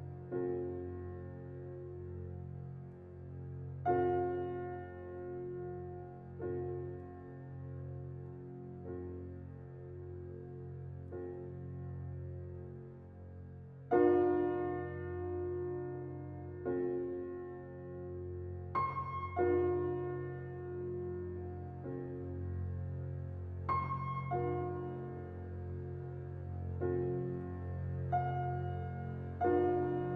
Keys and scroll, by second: 12.1 ctrl+j, 19.6 ctrl+u, 22.6 ctrl+t.